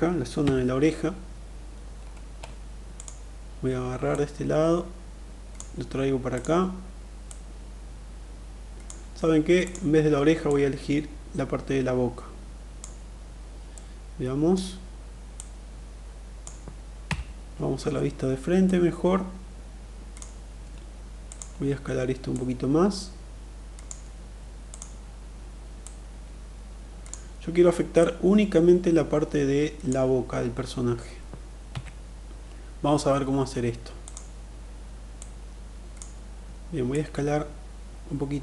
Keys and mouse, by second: 2.5 click, 3.8-5.0 drag, 5.8 click, 6.8-8.3 drag, 9.2 click, 9.9-12.3 drag, 13.2-14.1 middle drag, 14.8-16.0 drag, 16.6 KP_1, 18.1-19.8 drag, 20.8 click, 21.8-23.5 drag, 24.3 click, 25.3-26.6 drag, 27.5-29.5 drag, 31.1 KP_3, 33.6 click, 34.6 click, 36.4-38.4 drag.